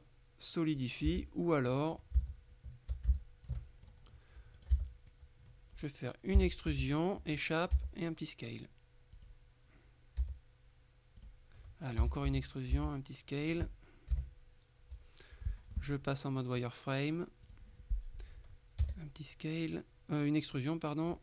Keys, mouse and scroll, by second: 1.2 Tab, 1.9 middle click, 3.2 shift+middle click, 3.7 click, 4.7 right click, 4.8 Tab, 5.2 click, 6.4 e, 6.8 Escape, 7.8 s, 9.3 click, 10.3 s, 11.3 click, 12.1 e, 12.4 Escape, 12.8 s, 13.5 click, 14.2 KP_3, 16.7 click, 17.5 click, 18.9 e.